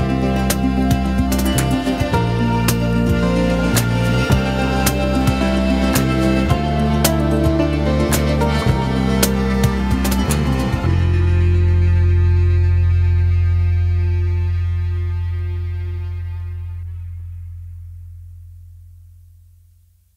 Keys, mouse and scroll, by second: 2.5 click, 3.2-3.9 middle drag, 3.9 r, 6.3 click, 6.8-9.0 middle drag, 9.0 click, 11.9-12.3 drag, 13.3 g.